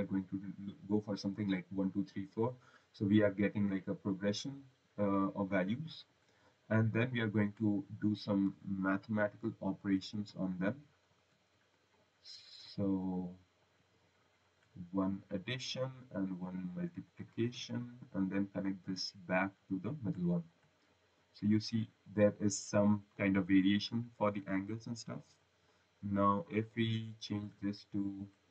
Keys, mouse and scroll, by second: 2.1 click, 2.8 scroll, 4.3 click, 6.0 click, 6.8 click, 7.6 click, 8.0 click, 9.9 ctrl+v, 11.8 click, 15.4 click, 16.9 click, 18.4 click, 20.4 click, 20.8 right click, 27.2 click, 28.1 click.